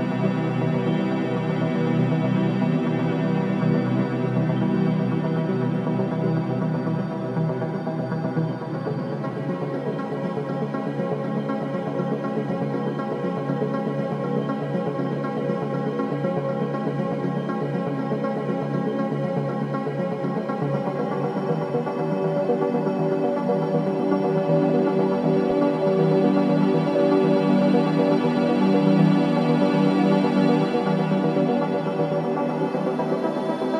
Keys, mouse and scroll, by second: 7.1 click, 7.5 scroll down 1, 8.9 scroll up 1, 9.4 typing, 10.0-10.7 scroll down 1, 11.4-11.8 scroll up 1, 12.2 click, 12.6-13.0 scroll up 1, 16.6 scroll down 1, 20.8 click, 21.7-22.0 scroll down 1, 22.8-24.2 typing, 25.7 click, 28.1-28.7 scroll up 1, 29.1 click, 30.8-31.4 scroll down 1, 31.4 click, 31.8-32.2 scroll up 1, 32.5-33.7 drag.